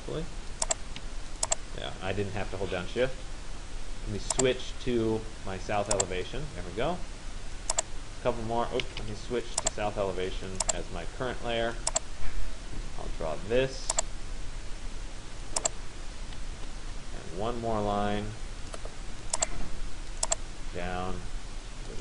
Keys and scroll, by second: 8.5 Escape, 16.2 Return.